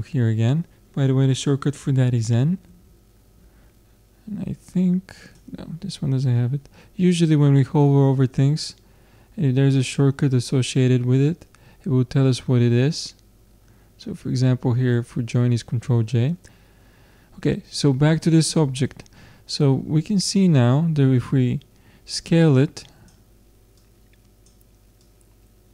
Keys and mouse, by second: 2.2 n, 2.7 n, 3.4 n, 5.2-7.1 drag, 22.3-25.7 drag.